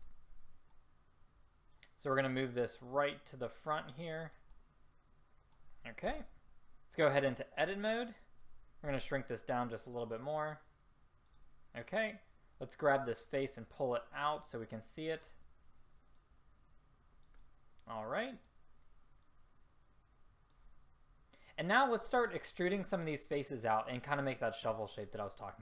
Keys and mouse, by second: 0.1 z, 1.6-3.4 drag, 4.4 drag, 4.6-6.3 middle drag, 6.3 z, 8.4 click, 9.0 s, 11.9-13.3 drag, 13.8 click, 17.3 click, 18.2-19.3 middle drag.